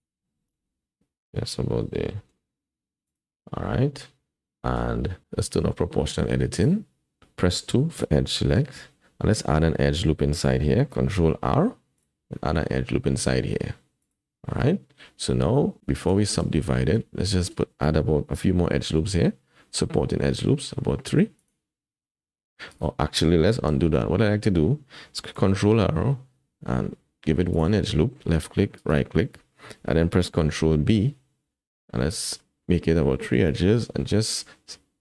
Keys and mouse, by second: 0.5 KP_1, 2.0 g, 3.4 click, 4.4-6.5 middle drag, 6.5 click, 8.0 2, 11.3 ctrl+r, 14.5 Tab, 16.2 shift+drag, 16.9 Tab, 18.8 ctrl+r, 23.7 ctrl+z, 25.4 ctrl+r, 30.3 ctrl+b.